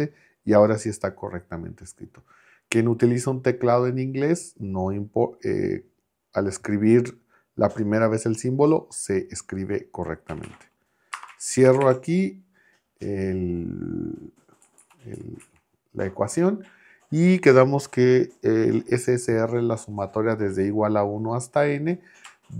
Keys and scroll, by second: 10.3 Right, 11.1 space, 11.7 shift+4, 14.6 Left.